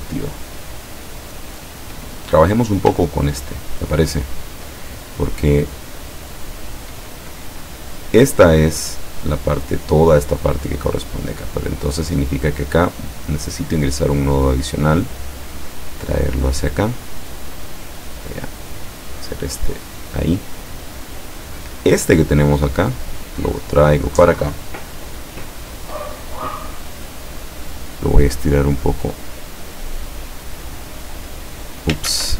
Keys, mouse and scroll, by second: 1.6 click, 4.1 ctrl+scroll up 2, 5.6 ctrl+scroll up 1, 13.0 click, 14.1-16.9 drag, 17.4-20.2 drag, 21.0 click, 22.6-24.6 drag, 27.7-30.4 drag, 30.9-32.0 drag, 32.1 ctrl+z.